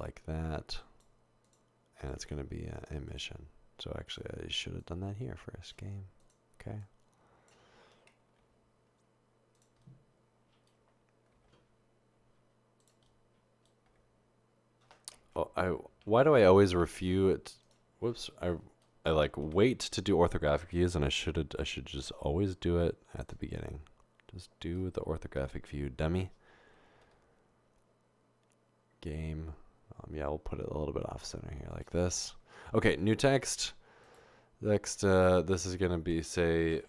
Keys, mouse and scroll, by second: 1.5 click, 2.0 click, 4.1 click, 4.8 click, 6.2 click, 6.8 click, 8.6 typing, 11.3 typing, 13.9 typing, 15.4-16.7 typing, 19.5 typing, 20.8 typing, 27.0 typing, 33.3 a, 36.1 Tab.